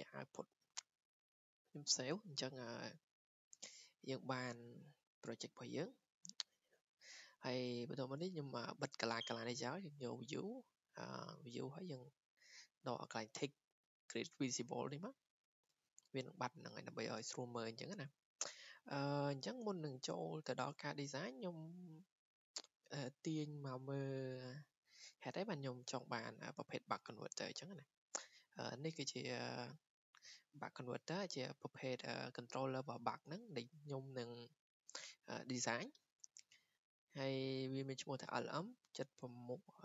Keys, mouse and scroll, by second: 0.0-0.1 typing, 1.5 click, 6.4-11.3 drag, 15.6-20.7 drag, 27.2-28.3 drag, 28.3-30.3 scroll down 1, 30.3-31.6 scroll down 1, 31.6-32.1 scroll down 1, 32.1-32.9 scroll down 1, 32.9-33.4 scroll down 1.